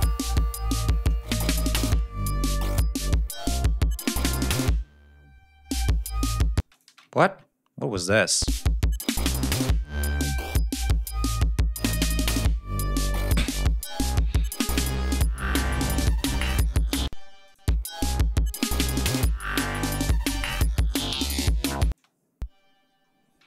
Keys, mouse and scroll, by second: 0.6 click, 1.2 shift+right click, 2.0-2.3 scroll down 2, 2.4-2.7 scroll up 2, 2.8 scroll down 2, 6.6 space, 6.7 click, 7.2 ctrl+scroll up 2, 8.0-8.5 scroll up 2, 8.7-9.5 scroll up 2, 9.6 ctrl+scroll up 2, 10.2-10.6 ctrl+scroll down 3, 11.3-12.6 ctrl+scroll down 7, 12.9-13.2 scroll down 2, 14.6 ctrl+scroll down 2, 15.9 ctrl+scroll down 2, 16.1-16.4 ctrl+scroll up 2, 17.1 space, 17.5 click, 17.8 ctrl+scroll up 2, 19.7-20.1 scroll up 2, 20.3-20.6 scroll down 2, 20.8 scroll up 2, 21.6 ctrl+scroll down 2, 22.0 ctrl+space, 22.3-22.6 ctrl+scroll up 3, 22.7-23.3 scroll down 5.